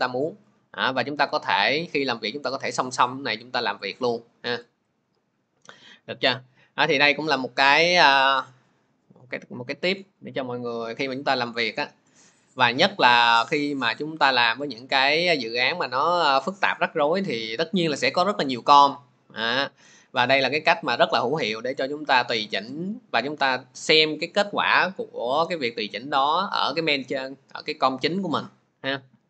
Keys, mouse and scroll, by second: 1.5 scroll, 2.3-3.0 scroll, 3.7 click, 4.7 click, 8.3 click, 11.9-13.1 middle drag, 13.1-13.7 scroll, 14.0-14.3 scroll, 19.7 scroll, 22.5 middle click.